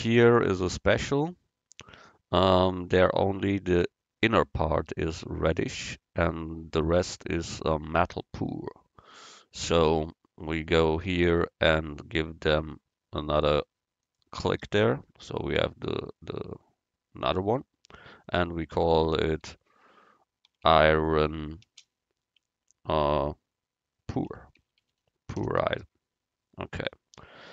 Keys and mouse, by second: 1.3-5.4 right drag, 14.1-16.0 drag, 18.3-20.2 drag.